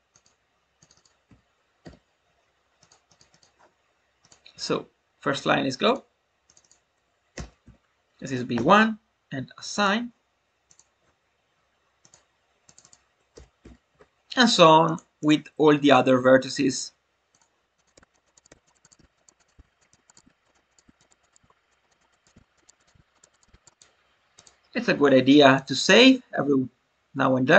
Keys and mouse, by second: 0.9-2.8 drag, 3.0 click, 3.3 click, 4.2-5.9 drag, 6.4 click, 6.6-9.2 drag, 9.7 click, 12.6 click, 12.9-14.5 drag, 15.2-18.1 drag, 18.2 click, 18.8 click, 19.5 click, 20.1 click, 20.8 click, 21.0 click, 22.0 click, 22.6 click, 23.4 click, 23.8-25.7 drag.